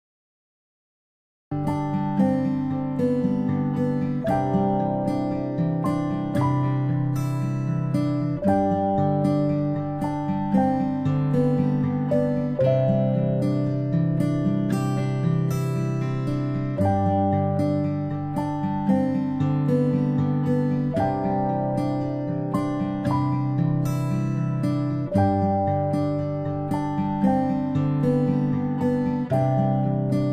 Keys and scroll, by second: 8.5 ctrl+x, 11.2 ctrl+v, 20.4 ctrl+z, 29.4 i.